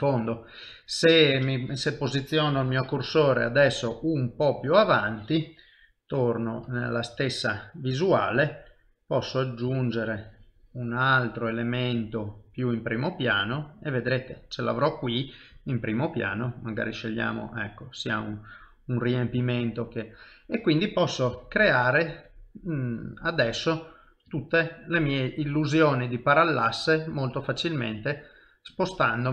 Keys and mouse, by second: 4.9 shift+right click, 6.1 KP_3, 6.6 KP_1, 9.2 click, 12.8 middle click, 16.3 click, 17.2 middle click, 21.3 KP_1, 22.4 ctrl+middle click, 23.1 middle click, 23.7 shift+middle click, 24.4 ctrl+middle click, 25.1 middle click, 28.9 ctrl+middle click.